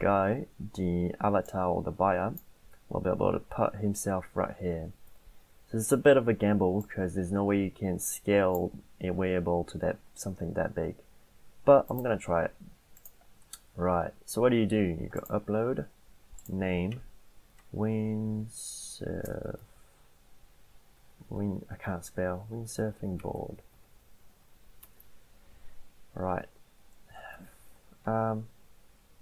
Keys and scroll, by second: 17.3-24.3 typing, 24.9 Tab, 27.0-28.0 typing, 28.1 ctrl+a.